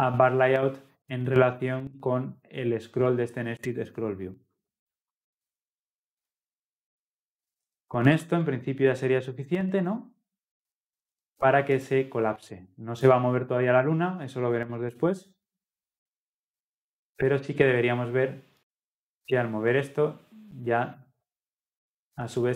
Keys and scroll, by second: 13.0 ctrl+F10.